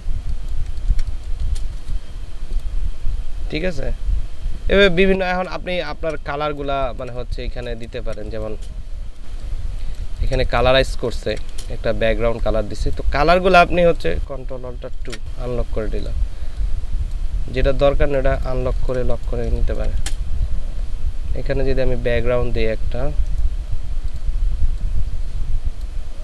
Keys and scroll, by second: 5.9 ctrl+space, 6.7 ctrl+space, 7.8 ctrl+space, 9.2 space, 11.1 ctrl+space, 15.1 ctrl+alt+KP_2, 18.6 ctrl+space, 19.5 ctrl+space.